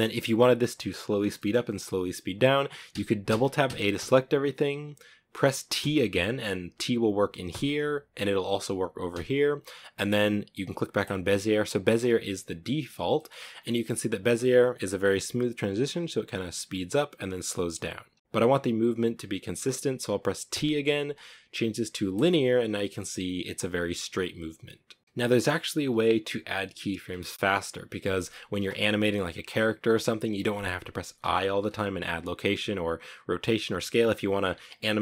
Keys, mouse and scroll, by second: 0.4 scroll down 2, 0.7-1.0 middle drag, 1.0 scroll down 1, 1.2-3.2 typing, 5.0 t, 7.2 t, 8.4 t, 10.9-11.3 scroll up 1, 11.7 ctrl+middle click, 12.1 scroll up 1, 12.5-15.6 middle drag, 19.8 t, 24.5-24.9 scroll down 2, 25.0 space, 26.5-27.4 drag, 27.4-35.0 shift+middle drag.